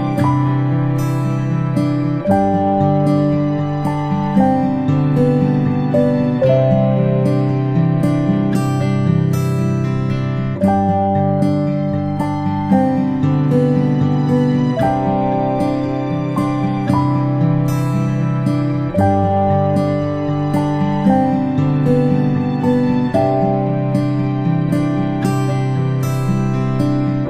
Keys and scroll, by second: 0.3-1.7 ctrl+space, 1.8 space, 4.7 space, 9.8-20.9 space, 17.8 ctrl+space, 18.1 ctrl+space, 22.9-25.1 typing.